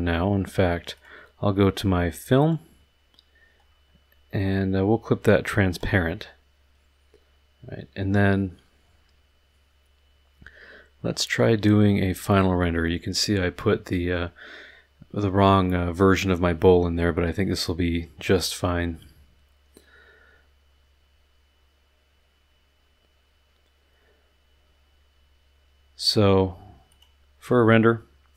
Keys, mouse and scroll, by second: 0.9 click, 2.4 click, 3.6 middle click, 3.6-4.0 scroll down 1, 5.7 click, 11.9 middle click, 26.9 click.